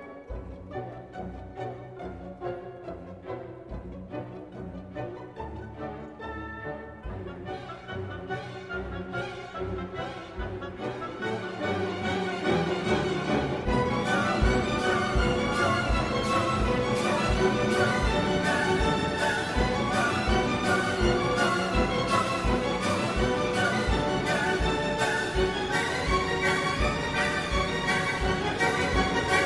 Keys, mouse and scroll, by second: 1.4 click, 2.3 click, 3.1 space, 7.0-23.8 drag, 25.2 space, 26.2 click, 26.7 click, 27.2 space, 28.0 click, 28.8-29.4 drag.